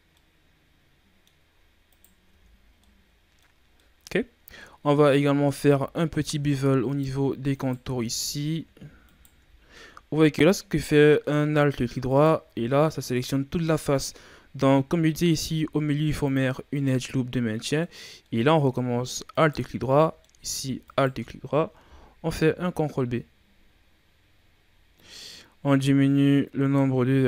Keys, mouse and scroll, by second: 0.1-1.3 middle drag, 1.3-1.8 scroll up 4, 1.8 right click, 2.2 Tab, 2.7-4.2 middle drag, 4.2 scroll up 1, 4.5 middle click, 5.4 ctrl+Tab, 6.8 alt+right click, 7.4 alt+right click, 7.9-9.0 middle drag, 9.0 alt+shift+right click, 9.7-12.0 middle drag, 12.0 alt+right click, 12.6-15.2 middle drag, 15.2 ctrl+r, 17.2-19.3 middle drag, 19.3 alt+right click, 19.8 middle click, 20.8 alt+shift+right click, 22.3 ctrl+b.